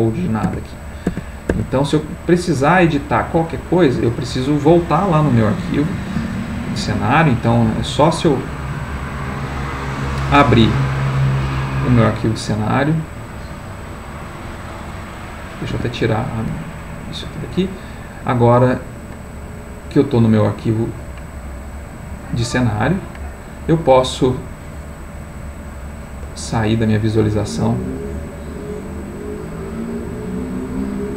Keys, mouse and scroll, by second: 0.5 Tab, 1.1 Tab, 6.2 ctrl+s, 7.7 click, 9.7 click, 11.2 click, 12.0 click, 12.5 click, 13.1 click, 16.2 Escape, 17.6 click, 19.1 middle click, 20.1 middle click, 22.4 middle click, 22.9 middle click, 23.9-26.1 middle drag, 27.4 click, 29.5 click.